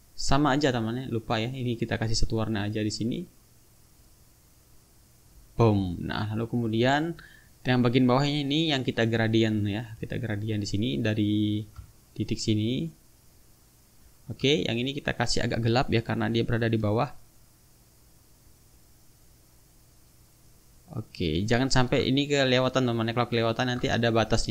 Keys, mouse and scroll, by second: 1.3 click, 2.1 click, 3.8 click, 5.0 click, 6.4 click, 7.5 click, 9.8 click, 11.5-14.1 ctrl+drag, 15.2 click, 17.1-20.6 drag, 21.8-23.7 ctrl+drag.